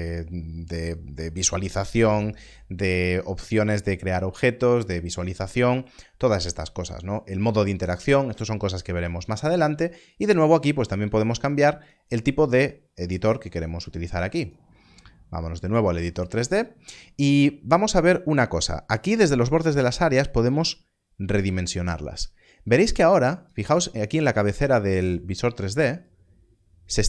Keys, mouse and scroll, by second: 10.0 click, 20.1 click, 25.9 click.